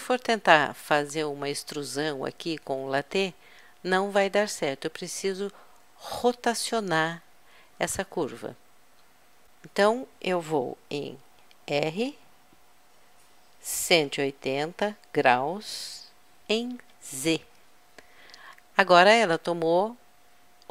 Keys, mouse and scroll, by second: 12.0 r.